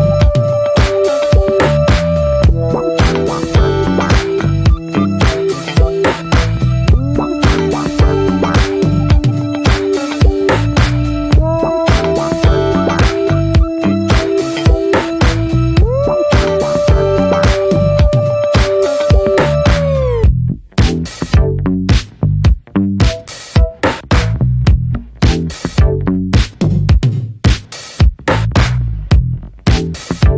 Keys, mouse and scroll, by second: 5.9 f, 10.3-17.9 drag, 17.9 ctrl+z, 20.5-24.1 drag, 24.1 ctrl+z, 26.9-30.3 drag.